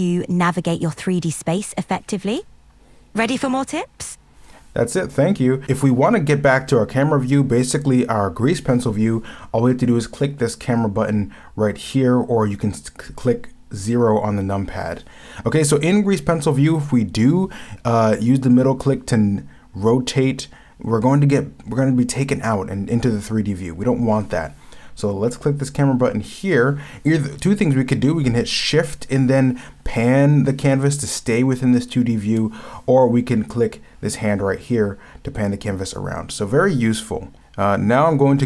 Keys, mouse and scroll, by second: 3.1 shift+middle click, 3.3 shift+middle click, 3.8-4.8 shift+middle drag, 28.7-29.1 scroll down 1.